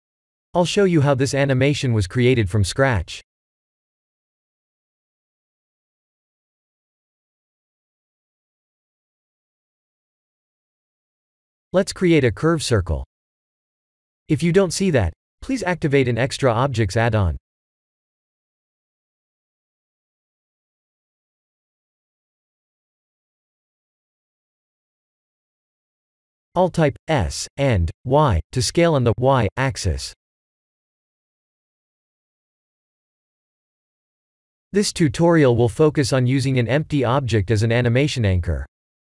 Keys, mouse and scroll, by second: 1.0 click, 1.7-2.2 middle drag, 4.4 click, 6.0 click, 8.7 click, 9.9-10.3 shift+middle drag, 11.7 shift+a, 20.9 click, 22.9 Tab, 23.4 s, 25.4 click, 26.1-26.6 middle drag, 27.4-28.3 middle drag, 28.3 s, 29.2 y, 30.6 click, 31.6 click, 32.5 middle drag, 33.2-33.7 middle drag, 35.0 shift+a.